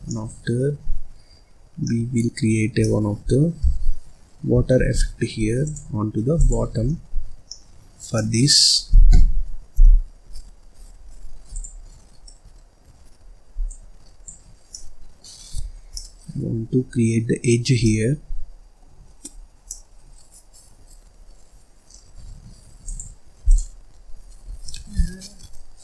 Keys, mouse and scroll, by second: 0.0-4.7 middle drag, 4.7 shift+a, 6.8 scroll down 1, 6.9-9.7 middle drag, 9.7 n, 10.8-11.5 scroll up 4, 11.5 click, 11.9-12.2 scroll up 1, 12.2-13.6 middle drag, 13.6-14.7 drag, 14.7 middle click, 15.3-15.9 scroll up 4, 15.9-19.0 middle drag, 19.0-19.6 scroll up 6, 19.6-21.2 middle drag, 21.2-22.4 scroll up 3, 22.4-22.8 scroll up 1, 22.8 click.